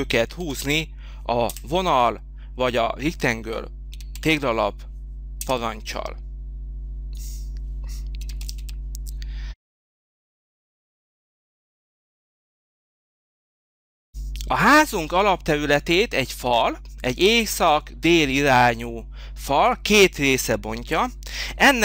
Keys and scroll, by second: 0.1 3, 0.5 0, 1.5 Return, 3.9 3, 4.2 0, 5.4 Return, 6.2 Return, 8.2 3, 8.4 0, 9.6 Return.